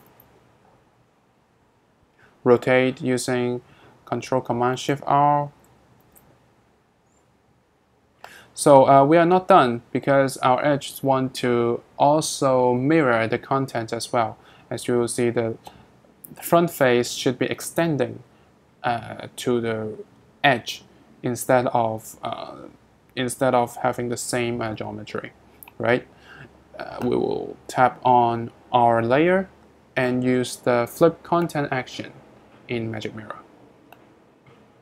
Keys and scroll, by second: 0.0 ctrl+shift+m, 6.0 ctrl+shift+super+r.